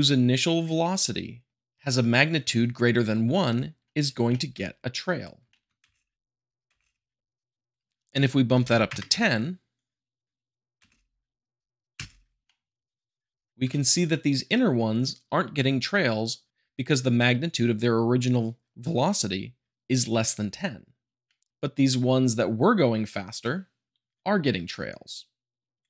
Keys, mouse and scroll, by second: 4.2-5.4 shift+middle drag, 5.4-6.6 shift+middle drag, 5.8 space, 7.7 click, 10.8 space, 11.9 space, 12.4-13.5 middle drag, 13.5 `, 13.7-14.7 shift+middle drag.